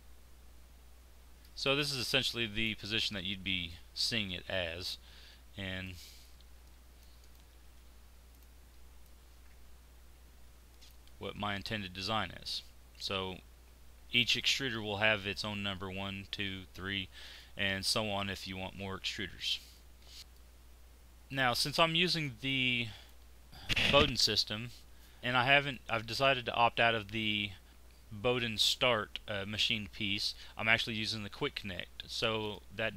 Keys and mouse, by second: 3.1-6.2 middle drag, 9.0 middle click, 9.1-10.1 drag, 10.1 middle click, 11.3 z, 11.9 z, 15.4-17.2 drag, 20.3-22.0 drag, 22.0-23.5 middle drag, 26.0-32.4 drag.